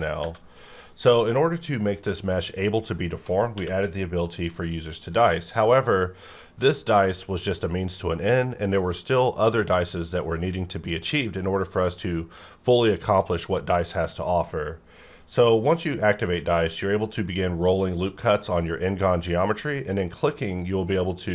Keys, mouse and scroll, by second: 0.2 Tab, 3.6 q, 4.8 click, 8.3-10.0 scroll down 1, 10.0-11.8 scroll up 1, 15.2-15.6 scroll down 1, 15.6-16.0 scroll up 1, 16.4-17.0 scroll down 1, 17.2-18.2 scroll up 1, 18.2-19.5 scroll down 1, 19.5-21.3 scroll up 1.